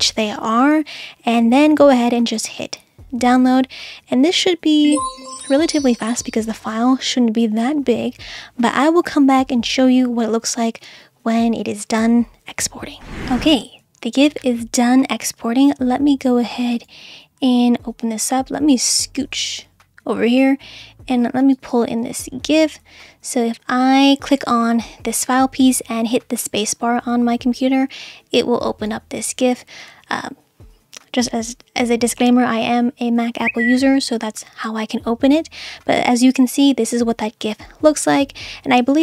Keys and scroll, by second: 26.4 space.